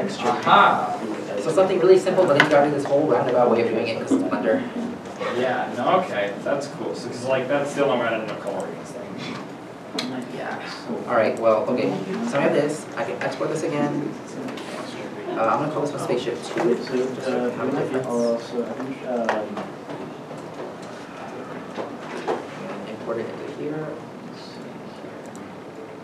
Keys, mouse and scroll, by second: 12.1 middle click, 12.5 Tab, 19.3 Tab, 19.7 Left, 19.7 Right, 19.9 2, 20.4 Return, 20.8 Return, 21.4 alt+Tab, 22.2 alt+Tab, 22.9 alt+Tab.